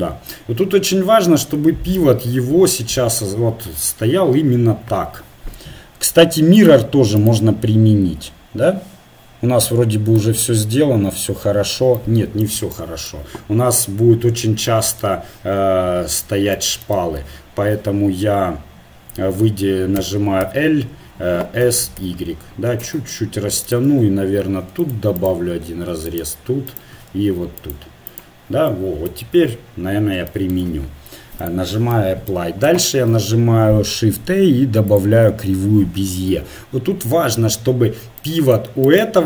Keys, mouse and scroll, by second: 0.2-1.3 middle drag, 2.1 middle click, 6.6-11.4 drag, 17.0 Tab, 20.0 a, 20.4 l, 21.6 s, 24.4 ctrl+r, 25.7 ctrl+r, 27.2 ctrl+r, 29.3 Tab, 31.4-33.3 drag, 32.9 shift+a, 36.3 KP_7, 38.8-39.2 right drag.